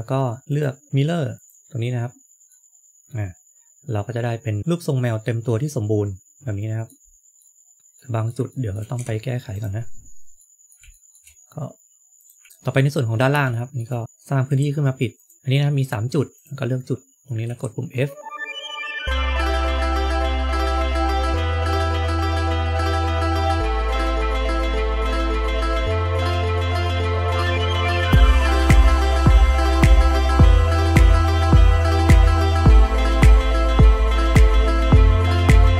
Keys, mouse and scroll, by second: 0.4 click, 0.9 click, 2.4 middle click, 6.9-7.3 scroll up 3, 7.3 middle click, 7.8 middle click, 8.4 shift+middle click, 9.5 Tab, 9.7-10.3 scroll up 1, 10.3 scroll up 2, 10.8 shift+middle click, 11.2-11.5 scroll up 2, 13.0-13.3 scroll up 2, 15.0 click, 15.3 shift+middle click, 16.2 click, 17.3 click, 19.1 shift+middle click, 19.3 shift+middle click, 19.6 click, 19.7 f, 20.2 scroll down 2, 20.3 shift+middle click, 20.6 middle click, 20.9 click, 21.0 f, 21.4 shift+middle click, 21.7 shift+middle click, 21.8 click, 21.8 scroll up 1, 21.9 middle click, 22.4 middle click, 23.9 f, 25.1 middle click, 25.7 click, 25.9 click, 26.5 f, 26.6 shift+middle click, 26.8 shift+middle click, 26.9 click, 26.9 f, 27.6 shift+middle click, 28.0 shift+middle click, 28.1 click, 28.7 shift+middle click, 28.8 scroll up 2, 28.9 shift+middle click, 29.1 click, 29.2 f, 29.9 scroll down 3, 30.0 ctrl+z, 30.5 ctrl+z, 30.5 scroll down 1, 30.6 middle click, 31.1 shift+middle click, 31.6 click, 32.1 click, 32.5 click, 32.9 f, 33.5 shift+middle click, 33.7-34.2 scroll up 1, 34.2-34.7 scroll up 7.